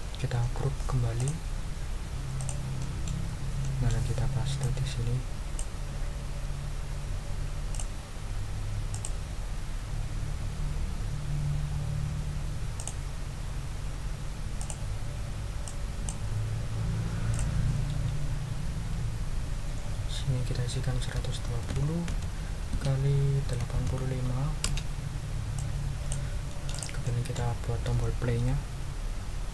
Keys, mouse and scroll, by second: 1.2 click, 2.4 middle click, 2.8 ctrl+middle click, 3.4 ctrl+scroll down 2, 3.6 ctrl+middle click, 4.6 middle click, 5.0 click, 7.7 click, 8.9 click, 12.8 click, 14.6 click, 15.6 click, 17.3 ctrl+click, 21.0 ctrl+a, 21.4 ctrl+1, 21.6 ctrl+2, 22.1 0, 22.7 Tab, 23.4 8, 23.7 5, 24.6 Return, 25.5 click, 26.7 click, 27.4 ctrl+click, 27.6 ctrl+scroll down 2.